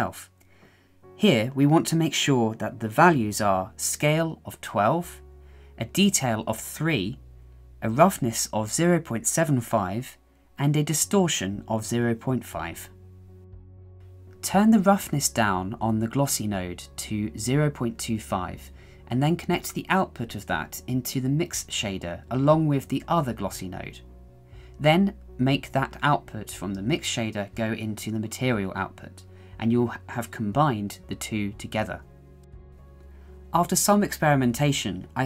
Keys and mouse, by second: 3.2-4.6 drag, 6.0-8.1 drag, 9.1-11.1 drag, 11.9-13.9 drag, 14.3-16.1 drag, 16.3-17.6 drag, 18.4-20.3 middle drag, 20.9 shift+middle click, 22.1 click, 23.1 click, 24.2-24.6 drag, 25.4-25.9 drag, 26.3-26.8 shift+middle drag, 27.2-28.3 middle drag, 28.9-31.0 drag, 31.2-33.3 drag, 33.5 middle click, 34.1-34.6 shift+middle drag, 34.7-35.0 middle drag.